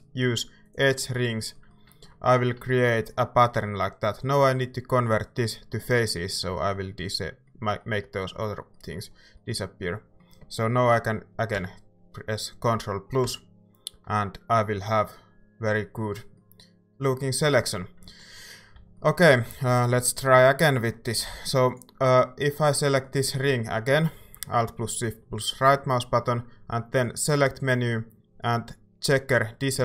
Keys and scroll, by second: 11.5 ctrl+KP_Add, 13.2 ctrl+KP_Add, 18.7 a.